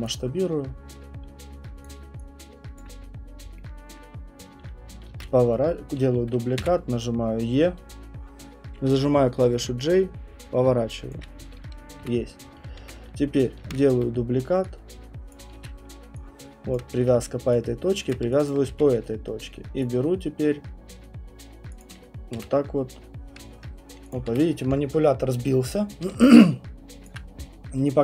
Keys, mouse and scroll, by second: 0.0 click, 1.8 click, 3.2 alt+click, 3.2 middle click, 3.3 middle click, 3.9 alt+middle click, 4.1 alt+middle click, 4.2 middle click, 5.2 ctrl+d, 6.6 e, 9.0-12.8 typing, 11.1 click, 13.6 ctrl+d, 13.9 w, 15.3 click, 15.5-18.7 typing, 16.7 click, 18.1 click, 18.5 alt+click, 19.8 right click, 21.8 click, 22.3 w, 24.1 click, 24.3 w.